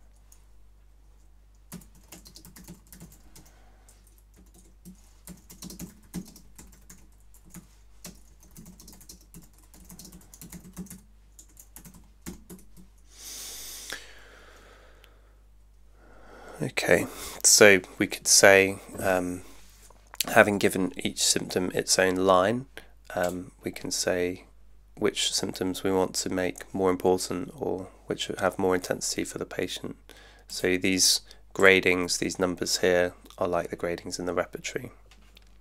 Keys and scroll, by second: 0.0-0.1 typing, 1.5-12.8 typing, 4.5 Tab.